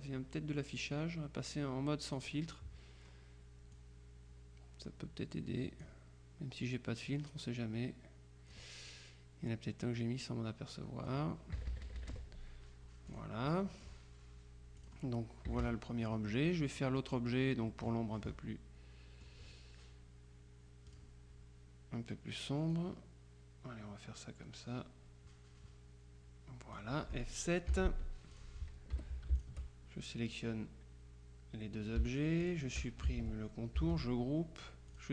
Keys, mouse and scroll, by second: 0.0 click, 2.2 click, 3.8-6.4 drag, 7.1-9.1 drag, 10.0-11.7 drag, 11.6 KP_Subtract, 13.2 click, 14.9 click, 15.6 KP_Subtract, 16.6-17.7 middle drag, 17.8-19.8 middle drag, 21.0 click, 22.8-27.3 drag, 27.8 F7, 28.4 click, 29.0 F1, 29.4 shift+click, 32.5 shift+click, 33.8 ctrl+g, 35.0 click.